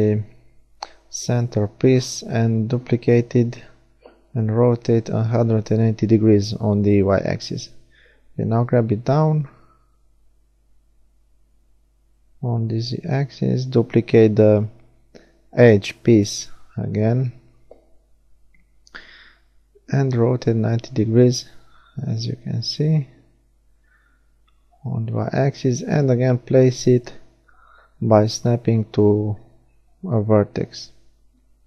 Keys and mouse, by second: 4.8 g, 6.0 middle click, 7.8 click, 11.9 shift+d, 12.2 middle click, 12.3-15.1 drag, 13.5 r, 23.8 g, 27.0 click, 28.3 KP_1, 30.1-31.5 drag.